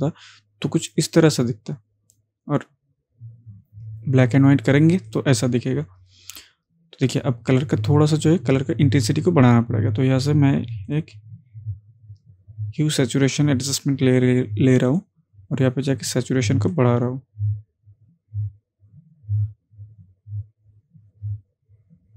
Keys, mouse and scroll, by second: 0.9 click, 5.1 click, 10.9 click, 10.9 click, 14.9-22.1 drag.